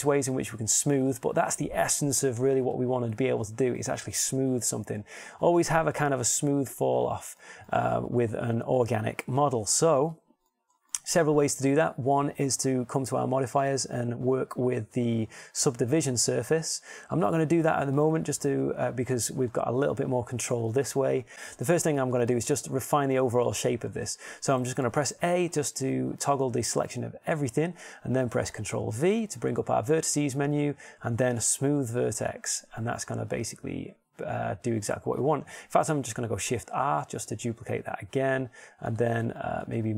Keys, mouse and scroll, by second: 11.8-14.5 middle drag, 18.1-19.9 middle drag, 25.5 a, 25.8 a, 30.0 ctrl+v, 33.8-35.8 middle drag, 37.6 shift+r.